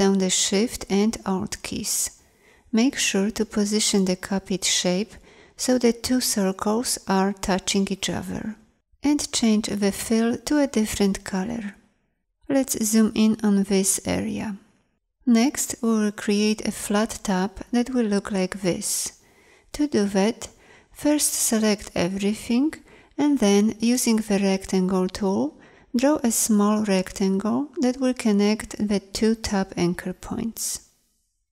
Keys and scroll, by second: 12.7 z.